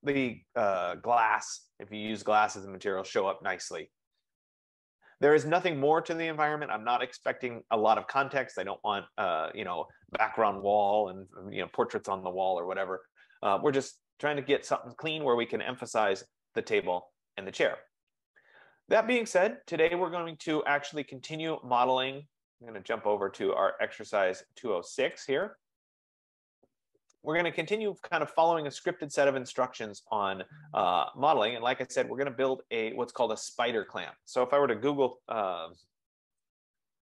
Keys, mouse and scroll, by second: 11.6 F15, 21.6-23.0 drag, 25.3 click, 28.0-30.3 drag, 32.5 click, 33.9 click, 35.9-37.0 typing.